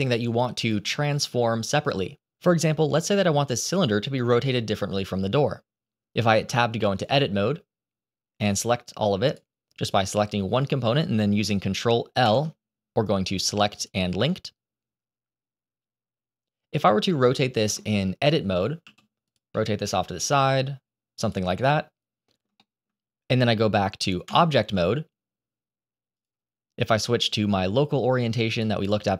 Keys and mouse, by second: 2.8 click, 3.8-4.1 shift+middle drag, 6.3 Tab, 6.9 click, 9.2 click, 12.1 ctrl+l, 13.6-15.2 drag, 16.8 middle click, 17.8 shift+middle click, 18.7 r, 19.4 middle click, 20.0 r, 21.5 middle click, 22.5 shift+middle click, 24.2 Tab, 26.1-28.9 drag.